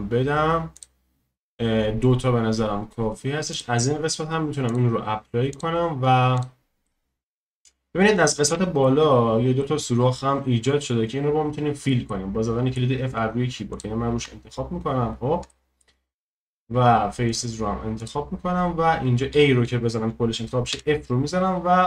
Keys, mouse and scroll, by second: 6.0 scroll up 1, 6.3 click, 6.8-7.5 middle drag, 7.5-8.2 scroll up 2, 8.2-8.6 scroll down 1, 8.6-13.7 shift+middle drag, 13.7-14.2 drag, 14.2 Tab, 14.9-15.5 scroll up 1, 15.5-17.3 shift+middle drag, 17.3-19.3 drag, 19.3 a, 20.7 f.